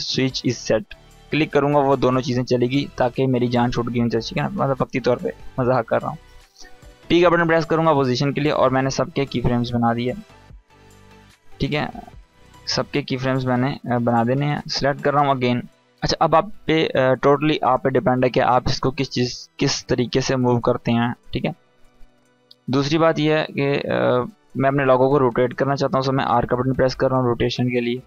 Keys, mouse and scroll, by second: 0.4-3.3 drag, 5.4 p, 9.1-15.7 drag, 18.9 scroll down 1, 24.2 click, 25.9 r, 27.2 click.